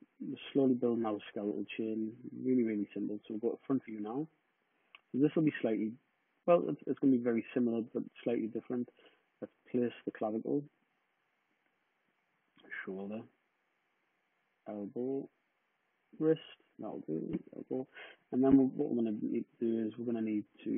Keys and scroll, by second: 2.6 space, 16.9 Return, 17.5-17.9 typing.